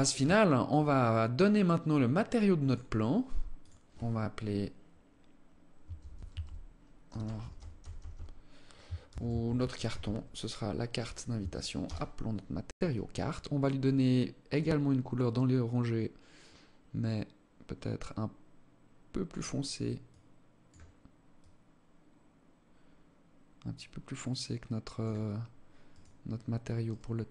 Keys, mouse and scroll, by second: 2.0 click, 3.0 click, 13.2 click, 26.2 right click, 26.9 right click.